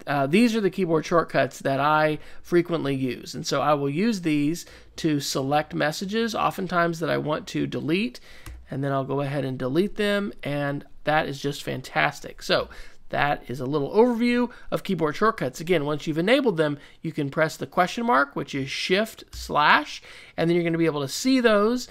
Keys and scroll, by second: 1.5-3.3 typing, 4.4-8.4 typing, 19.3 shift+/.